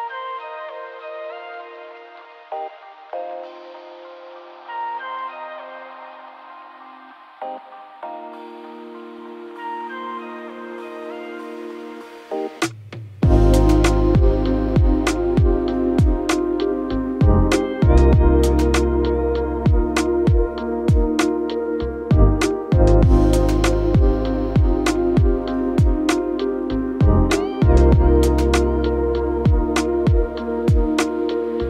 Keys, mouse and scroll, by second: 10.4 2, 10.8 0, 11.1 Return, 29.1 5, 29.3 Return.